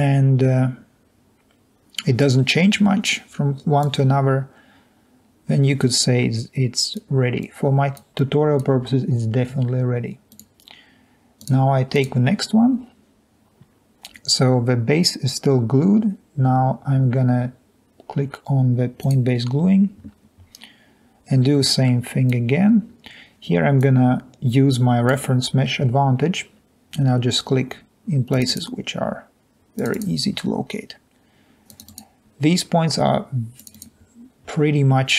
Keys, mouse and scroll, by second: 8.4 click.